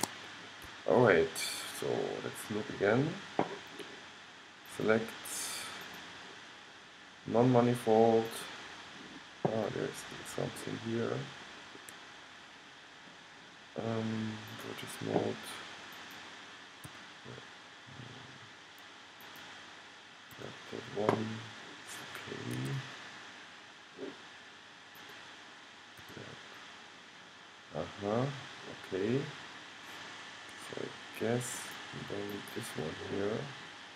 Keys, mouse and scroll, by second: 0.9 middle click, 1.1 middle click, 3.3 middle click, 4.8-5.8 drag, 6.0 click, 9.9-14.7 middle drag, 14.7-17.9 drag, 17.0 f, 19.4-21.3 drag, 20.6 g, 24.1-25.1 middle drag, 25.1-26.9 drag, 26.1 g, 31.7-32.9 drag.